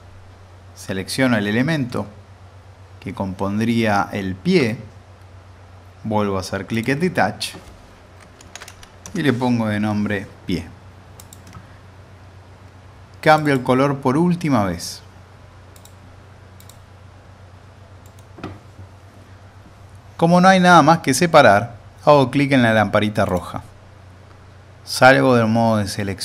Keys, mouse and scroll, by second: 1.9-4.7 middle drag, 6.7 click, 8.4 typing, 11.2 click, 15.7 click, 17.5-18.0 scroll down 1, 18.0 middle click, 18.1 scroll down 1, 23.3 click.